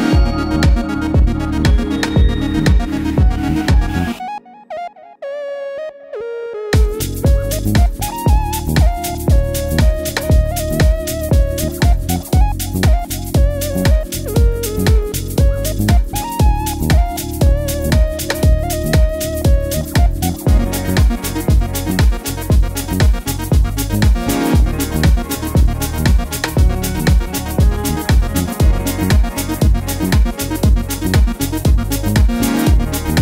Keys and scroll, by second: 7.2 Page_Down, 7.3 Page_Down, 13.3 super+c, 15.2 super+v, 21.8 super+z, 32.3 super+c, 32.9 super+v.